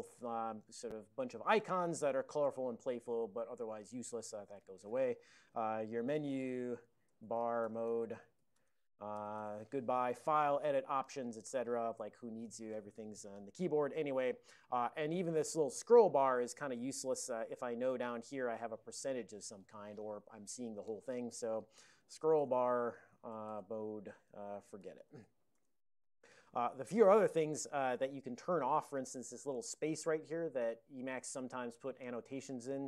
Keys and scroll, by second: 5.1 alt+x, 5.2-9.7 typing, 21.4 alt+x, 21.5-25.7 typing, 25.9 Return.